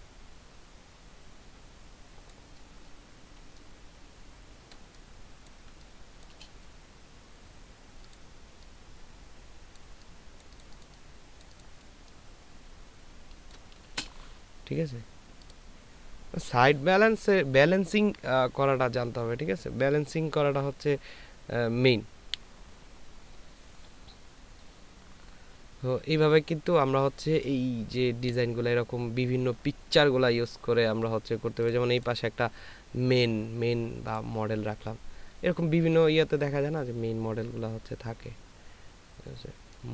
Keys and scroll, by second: 3.8 ctrl+space, 5.7 ctrl+space, 12.2 ctrl+space.